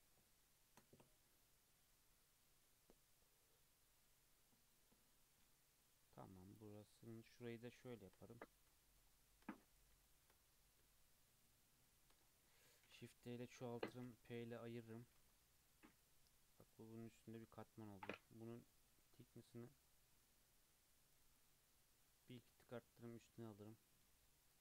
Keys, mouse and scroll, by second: 5.8 click, 7.1 shift+drag, 8.1-9.7 shift+scroll up 10, 8.7-9.1 shift+middle drag, 10.1 shift+middle click, 10.3-11.0 scroll up 4, 11.0 shift+click, 12.2-12.9 scroll down 4, 12.9 shift+d, 14.2 p, 14.6 Tab, 14.8 click, 15.1 alt+z, 15.3-15.9 scroll down 5, 15.9-16.6 middle drag, 16.6 click, 17.1-19.3 middle drag, 19.3-22.3 drag, 22.5 scroll down 2, 22.7-24.4 middle drag, 24.4 click.